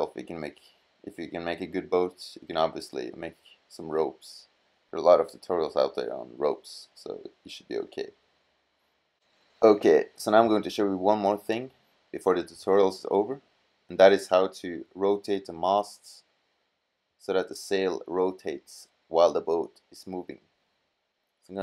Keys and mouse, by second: 2.6-3.5 middle drag, 3.8-4.9 middle drag, 8.2 middle drag.